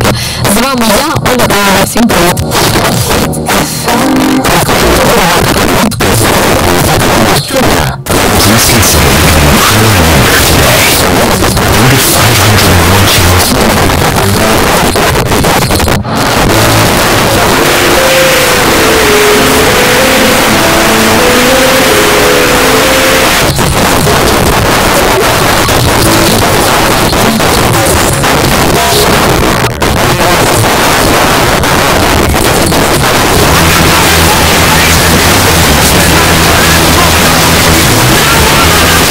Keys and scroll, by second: 0.0-0.2 typing, 0.5 Down, 0.6 Down, 0.8 Down, 0.9 Return, 1.7 typing, 13.4 Page_Down, 23.2 Page_Down, 39.0 space.